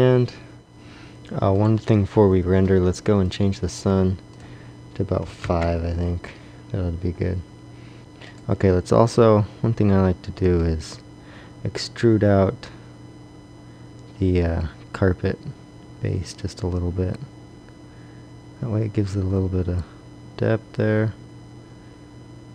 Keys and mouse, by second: 0.6 Escape, 1.5-3.1 drag, 8.0 a, 10.6 Tab, 12.3 e, 14.3 e.